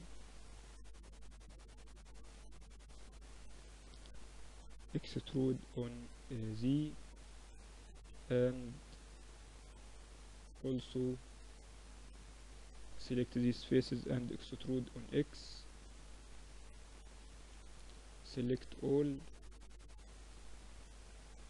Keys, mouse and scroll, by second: 0.9-5.4 drag, 4.3 e, 7.1 ctrl+r, 8.6 middle click, 8.6-8.9 scroll up 1, 8.9-13.6 drag, 12.9 e, 16.1-17.1 middle drag, 16.3 a, 16.5 a, 17.1-19.0 drag, 19.9-21.1 middle drag, 20.2 z, 21.1-21.4 drag, 21.1 z.